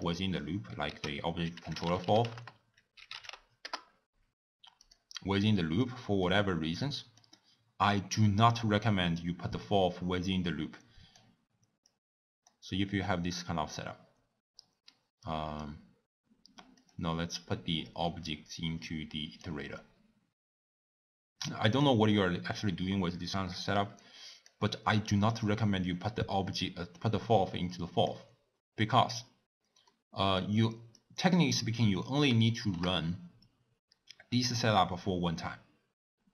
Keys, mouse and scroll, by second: 3.8 ctrl+a, 11.3 click, 13.9 Left, 15.8 Left, 18.4 Left, 20.9 Left, 27.5 click, 32.4-32.9 shift+middle drag, 32.9 scroll down 3.